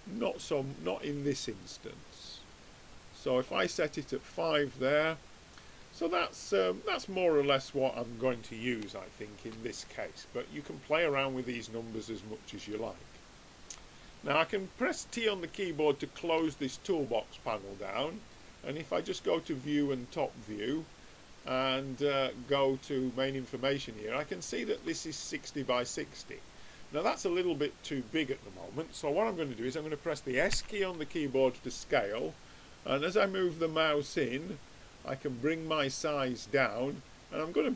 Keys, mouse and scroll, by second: 16.3 t, 18.3-20.1 drag, 21.4-23.2 drag, 24.2-30.5 middle drag, 30.5 s.